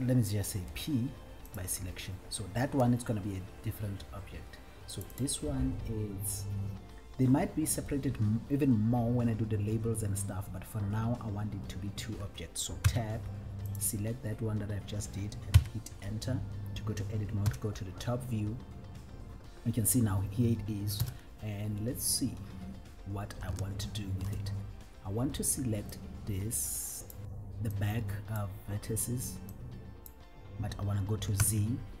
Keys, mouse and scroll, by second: 0.8 p, 5.5 click, 9.2-10.1 scroll down 1, 10.1-10.6 scroll up 1, 13.1 Tab, 14.0 click, 15.9 Tab, 17.6 KP_7, 21.2 KP_1, 23.2-23.7 scroll up 1, 23.9-24.7 shift+middle drag, 25.4-25.9 scroll up 1, 26.3-27.4 drag, 28.0 click, 29.8 click, 31.6 z.